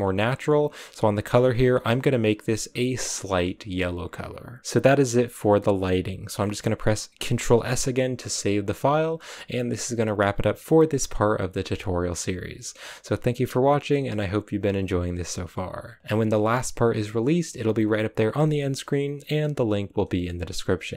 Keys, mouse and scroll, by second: 3.1 click, 4.6-20.9 middle drag.